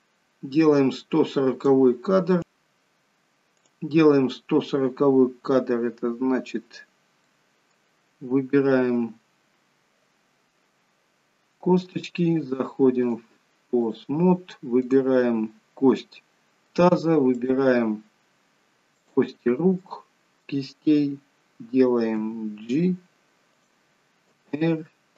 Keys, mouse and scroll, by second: 2.4 middle click, 3.6 click, 7.2 middle click, 9.6-10.4 scroll up 1, 11.9 click, 13.1 click, 14.8 click, 16.0 middle click, 17.3 shift+click, 19.0 shift+click, 19.9 middle click, 22.4 g, 24.3 r.